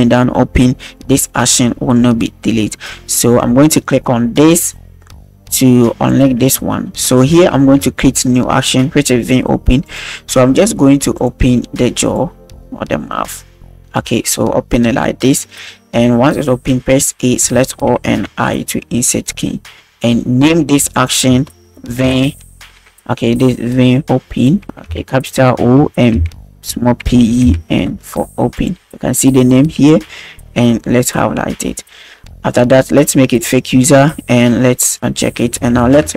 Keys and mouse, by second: 6.1 click, 7.6 ctrl+s, 9.9 click, 11.2 click, 12.2 click, 17.2 a, 18.2 i, 20.9-28.6 drag, 29.5-29.9 drag, 33.5 click, 36.0 alt+g.